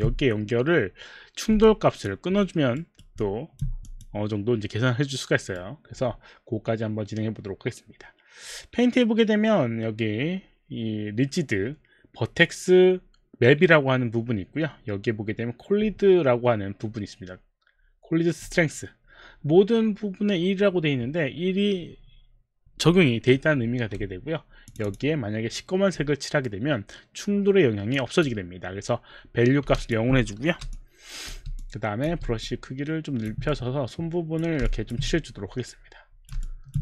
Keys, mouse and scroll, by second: 0.4 alt+middle click, 1.7 alt+click, 2.4 alt+middle click, 2.4 alt+click, 2.8 alt+middle click, 2.8 alt+right click, 3.5 alt+click, 3.5 alt+right click, 4.0 click, 5.6 right click, 24.7 click, 28.0 click, 29.7 alt+click, 30.6 b, 31.6 click, 31.6 b, 32.2 b, 32.6 click, 32.6 b, 34.0 click, 34.7 alt+click, 35.1 click, 36.4 alt+click.